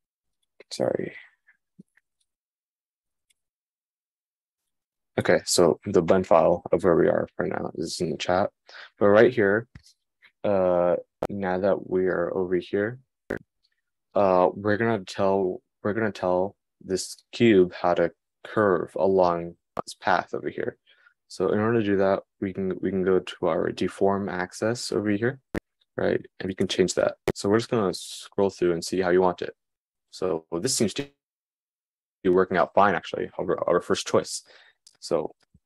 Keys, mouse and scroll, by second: 20.2-26.8 middle drag, 26.8-35.6 drag.